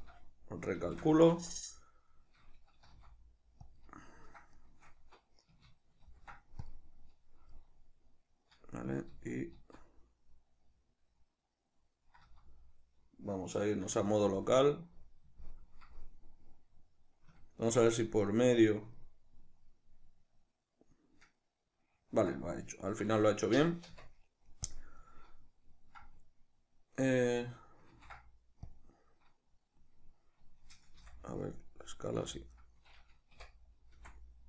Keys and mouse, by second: 0.8 shift+n, 1.3 Tab, 2.9 g, 3.9 click, 4.6 shift+right click, 6.1 ctrl+shift+b, 7.6-17.4 middle drag, 9.1 z, 12.2 z, 13.8 q, 23.9 Tab, 27.9 ctrl+d, 31.0 n.